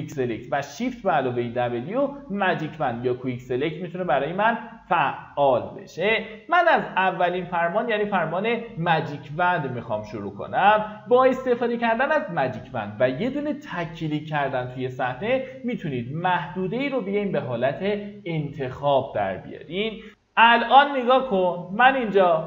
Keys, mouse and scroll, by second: 0.9 shift+w, 2.0-2.9 typing, 4.0 w, 6.8 right click, 10.1 click.